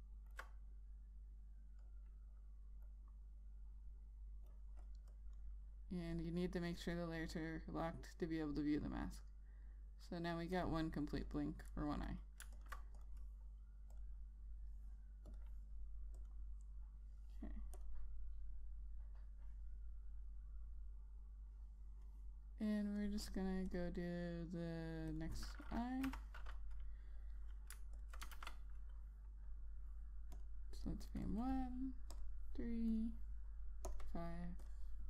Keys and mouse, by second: 0.4 alt+click, 2.5 click, 23.4 click, 28.7 alt+click, 29.1 ctrl+a, 31.1 click.